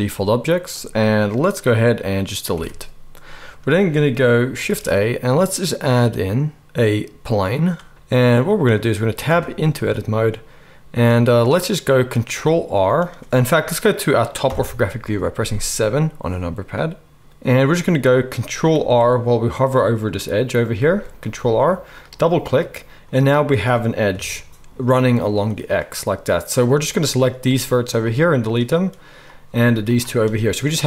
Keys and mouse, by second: 2.5 Delete, 4.6 shift+a, 9.3 Tab, 14.4 KP_7, 20.8 ctrl+r, 22.1-27.0 middle drag, 24.1 KP_7, 27.0-30.8 drag, 27.3 x, 29.4 x.